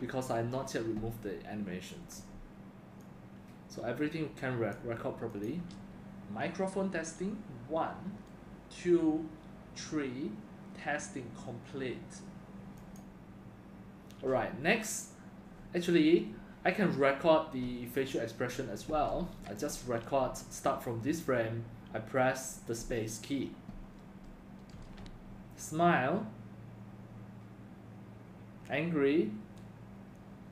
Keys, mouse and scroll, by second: 5.3 click, 16.5 click, 19.5 click, 24.7 space.